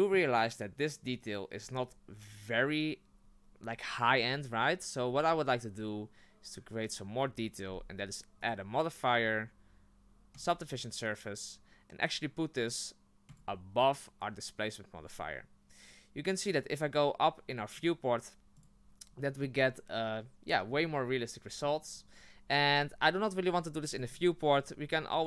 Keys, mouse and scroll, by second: 8.4-11.5 drag, 13.3 click, 17.7 click, 19.2-23.9 middle drag, 23.9 click, 25.1 click.